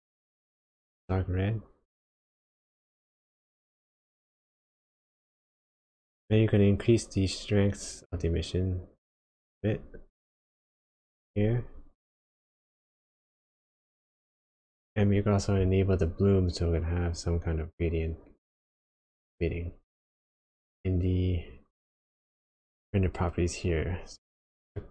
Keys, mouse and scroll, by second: 6.1 click, 8.2 click, 12.0-12.8 scroll down 2, 12.8 middle click, 20.2 click, 24.3 click.